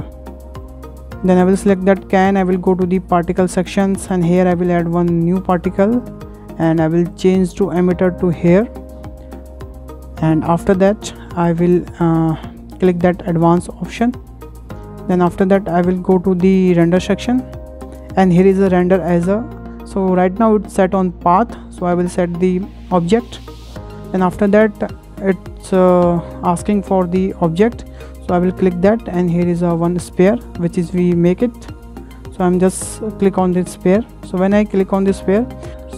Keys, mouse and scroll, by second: 0.0 scroll up 2, 0.3 shift+middle click, 0.7 click, 1.5-1.8 scroll down 2, 1.8-3.2 shift+middle drag, 3.2-4.0 drag, 5.4 click, 6.2-6.7 scroll down 2, 6.7-8.7 shift+middle drag, 8.7 click, 9.1-9.4 scroll down 3, 9.4-12.5 middle drag, 14.0 click, 14.4-14.8 scroll down 5, 15.2 scroll up 1, 17.2-20.4 drag, 21.8-24.1 drag, 24.1-24.6 scroll down 4, 28.6-34.0 drag, 34.5 scroll up 6, 35.1-35.4 shift+middle drag, 35.4-35.9 scroll down 2.